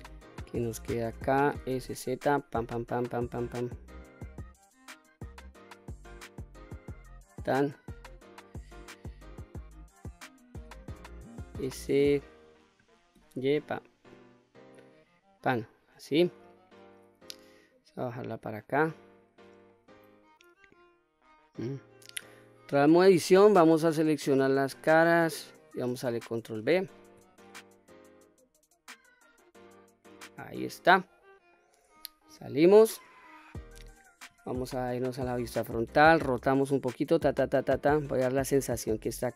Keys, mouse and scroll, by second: 1.3 s, 1.6 z, 6.8 click, 7.5-9.0 middle drag, 10.3 s, 12.9 y, 14.9 click, 15.3-16.5 middle drag, 17.5-19.1 drag, 19.4-20.4 middle drag, 20.8-21.3 scroll up 1, 21.3-22.5 scroll down 1, 22.5 Tab, 23.0-23.6 middle drag, 24.2 2, 25.1-25.7 scroll down 1, 26.3 ctrl+b, 29.8 click, 30.2-31.2 middle drag, 32.0 Tab, 32.5 scroll down 1, 32.6-33.3 middle drag, 34.6 KP_1, 35.6 r, 38.8 click.